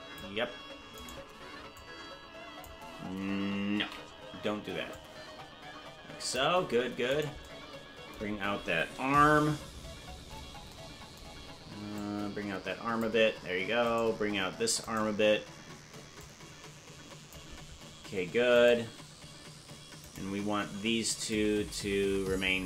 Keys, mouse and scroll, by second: 1.2 right click, 1.7 click, 4.3 ctrl+z, 4.9-6.4 drag, 7.2 right click, 9.2 KP_Decimal, 9.7-10.6 scroll down 16, 11.9-13.0 drag, 14.1 right click, 15.0 right click, 16.1-17.3 drag, 18.8 right click, 20.2 shift+right click, 21.3-22.6 drag.